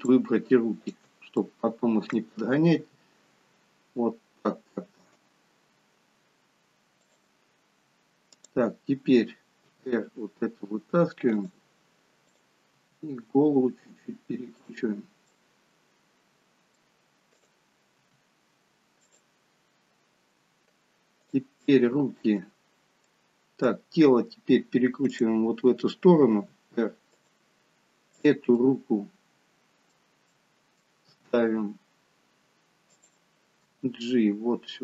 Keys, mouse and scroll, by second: 0.0 shift+click, 0.8 shift+click, 1.4 middle click, 2.7 r, 8.4 click, 9.7 r, 12.3 click, 12.8 r, 15.3 middle click, 17.4 click, 18.1 r, 21.2 click, 21.5 middle click, 22.8 scroll down 3, 23.1 middle click, 24.2-25.1 scroll up 3, 25.1 click, 26.5 r, 28.7 click, 28.7 middle click, 31.0 middle click, 31.0 r, 33.5 g.